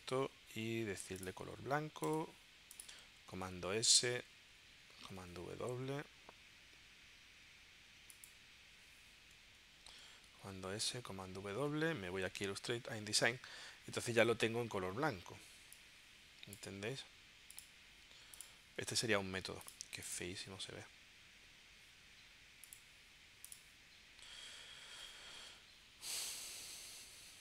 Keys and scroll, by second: 3.4 super+s, 4.9 super+w, 10.1 super+s, 10.9 super+w, 11.6 super+Tab, 25.4 super+Tab.